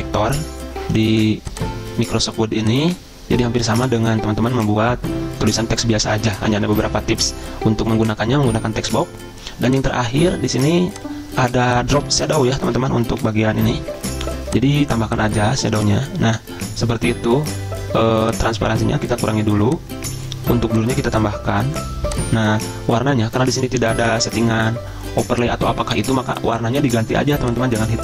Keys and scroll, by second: 13.1 ctrl+z.